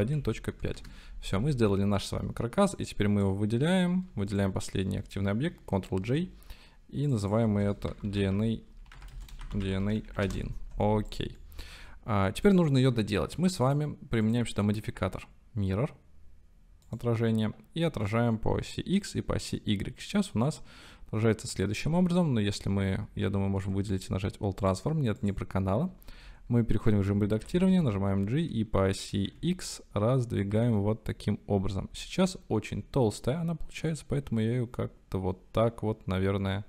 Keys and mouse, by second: 0.0-0.5 typing, 0.8 KP_Enter, 1.7-2.2 drag, 2.7 click, 4.3-5.0 shift+drag, 6.0 ctrl+j, 7.3-9.0 drag, 10.0 click, 11.4-11.8 drag, 13.7 click, 14.4-17.0 drag, 23.2 ctrl+a, 24.6-26.2 drag, 26.2 Tab, 27.5 g, 27.7 y, 29.3 x.